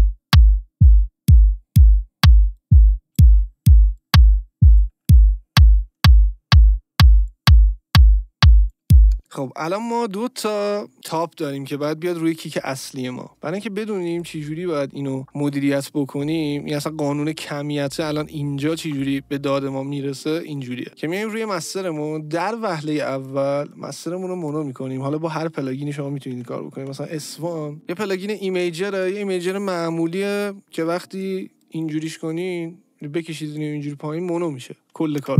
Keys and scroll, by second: 4.9 ctrl+d, 9.1 space, 35.1 space.